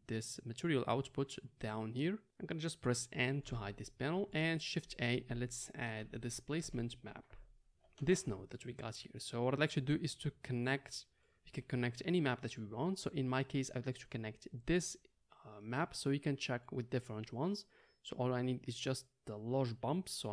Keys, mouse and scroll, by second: 3.4 n, 5.0 shift+a, 9.7-14.7 middle drag, 14.7 click, 14.8-18.5 middle drag, 18.5-20.3 drag.